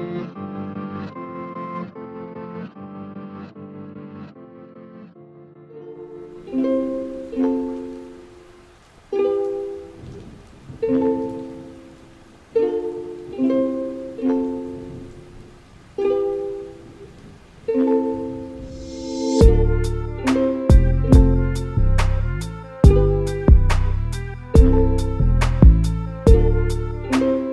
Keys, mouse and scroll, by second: 0.3 a, 0.5 a, 1.5 click, 1.7 click, 2.2 click, 2.9 ctrl+b, 4.8 a, 5.0 a, 5.2 Tab, 5.5 a, 5.7 a, 5.8-6.2 scroll down 2, 6.2-8.6 middle drag, 8.6 click, 9.8 a, 12.2 s, 14.5 KP_1, 15.2 z, 15.5-16.7 scroll up 5, 16.7 middle click, 17.2 z, 17.5 shift+middle click, 18.2 2, 18.7 click, 18.9 click, 19.3 g, 20.9 a, 21.2 Tab, 21.4-21.8 scroll down 3, 21.8 a, 22.0 a, 22.5-24.0 shift+middle drag, 24.0 click, 24.7-25.4 scroll down 3, 25.4 shift+d.